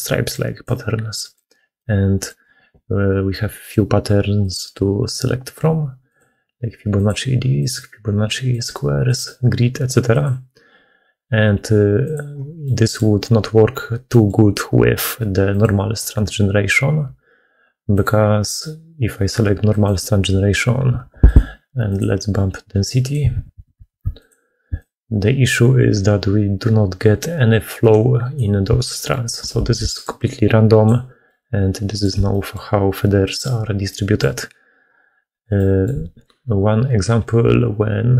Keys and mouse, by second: 1.7 middle click, 5.3-12.5 drag, 12.5 middle click, 14.0 middle click, 15.4-19.8 drag, 23.3-24.6 drag, 23.3 2, 23.8 2, 26.4-28.5 shift+drag, 28.8 middle click, 29.2 middle click, 29.7-31.9 d, 31.1 click, 32.2 click, 32.2 d, 33.8 click, 35.4 middle click.